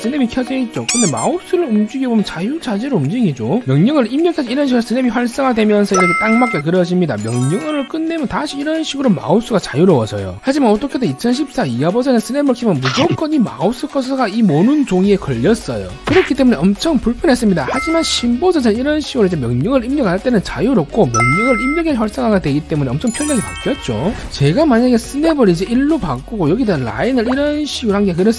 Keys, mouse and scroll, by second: 1.4 scroll up 1, 4.3 1, 4.6 right click, 5.3 click, 5.9 click, 6.3 click, 6.9 click, 8.3 right click, 25.3 right click, 25.9 1, 26.2 right click, 26.8 scroll down 1, 27.1 scroll up 1, 27.6 1, 27.7 right click, 27.9 click.